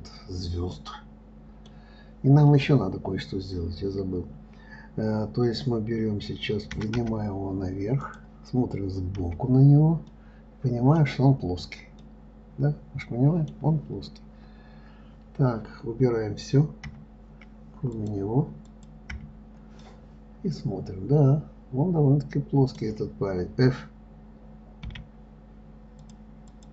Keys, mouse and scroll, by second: 1.1-4.2 middle drag, 10.5-11.8 middle drag, 11.8-12.4 scroll up 1, 12.4-15.4 middle drag, 17.3 KP_Divide, 18.3 click, 19.0 click, 19.5 KP_Divide, 20.2-23.2 middle drag, 26.4 click.